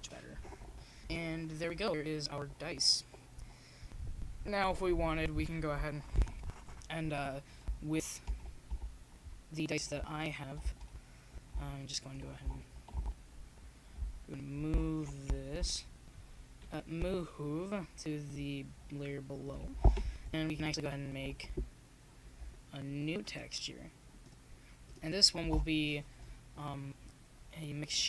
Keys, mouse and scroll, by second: 0.3 click, 1.0 middle click, 4.6 middle click, 7.6 click, 13.9-15.9 middle drag, 15.4-17.5 drag, 18.9-20.7 drag, 20.7 middle click, 21.4 Tab, 22.7 shift+z, 23.5 shift+z, 25.8-26.9 drag, 26.5 s, 27.2 click.